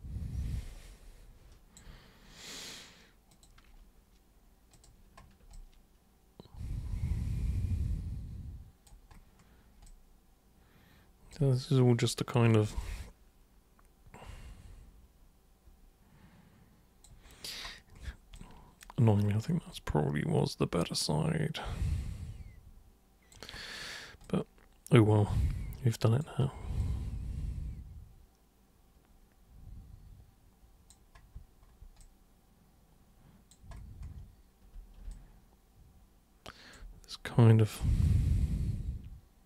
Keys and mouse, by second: 3.3 super+click, 4.7 super+click, 5.5-8.9 alt+super+drag, 9.9-11.4 alt+super+drag, 12.8-17.1 alt+super+drag, 18.4 alt+super+click, 19.8-23.3 alt+super+drag, 24.3-26.2 alt+super+drag, 26.8-30.9 alt+super+drag, 32.0-33.5 alt+super+drag, 35.2-36.7 alt+super+drag, 38.1-39.4 alt+super+drag.